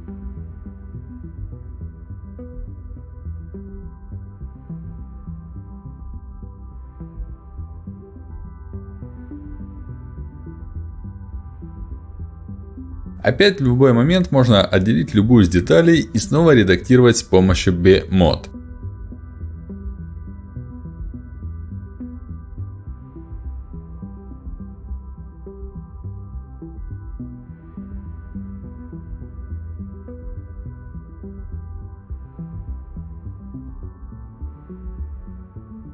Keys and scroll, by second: 3.1 ctrl+shift+x, 4.0 Escape, 4.8 ctrl+alt+x, 12.9 ctrl+shift+x, 13.0 Escape, 14.4 ctrl+alt+x, 18.6 ctrl+alt+x, 21.7 ctrl+alt+x, 24.6 ctrl+alt+x, 27.2 ctrl+shift+x, 31.4 space.